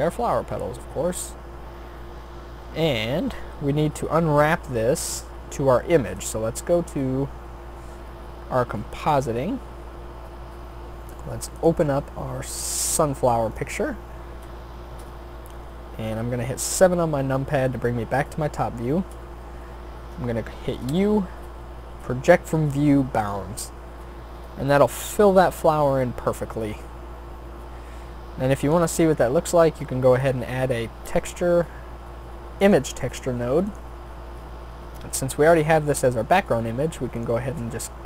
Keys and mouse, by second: 6.2-7.7 drag, 16.9 middle click, 20.9 u.